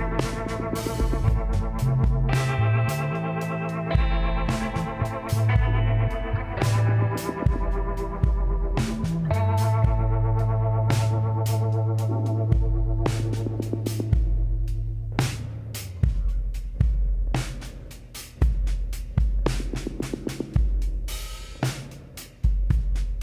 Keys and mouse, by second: 0.2 z, 1.7 r, 4.8 s, 7.1 click, 8.6 KP_7, 10.4 shift+d, 13.2 shift+d, 15.1 shift+d, 19.6 b, 21.6 click, 22.5-23.2 drag.